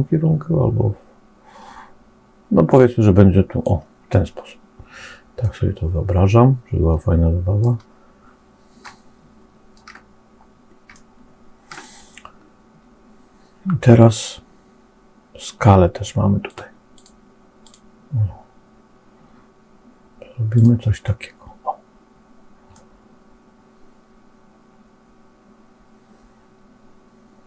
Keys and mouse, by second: 5.3-7.5 middle drag, 8.7 middle click, 10.8 shift+click, 11.6 middle click, 16.3 click, 16.8 click, 17.5 click, 22.6-27.4 middle drag.